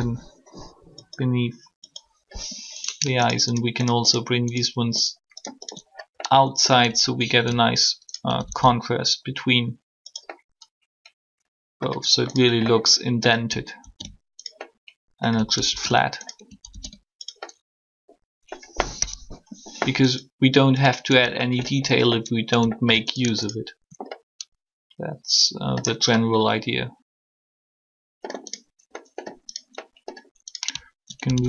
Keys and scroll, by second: 18.9 3.